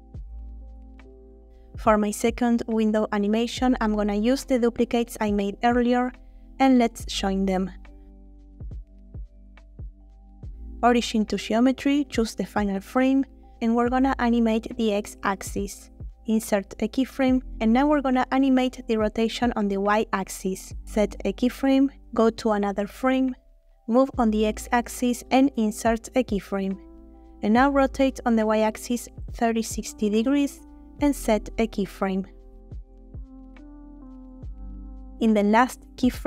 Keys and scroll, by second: 9.6 ctrl+j, 14.2 g, 14.4 x, 15.5 Escape, 18.8 r, 18.9 y, 19.5 Escape, 23.5 g, 23.6 x, 28.3-29.3 typing.